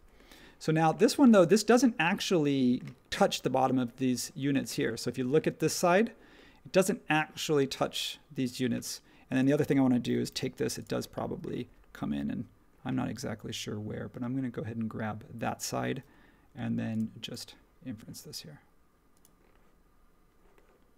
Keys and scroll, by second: 1.1 space, 10.3 l.